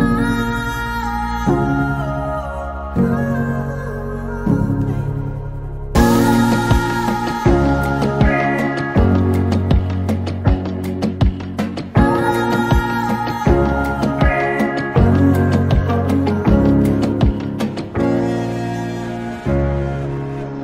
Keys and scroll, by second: 10.2 |, 18.6 Return.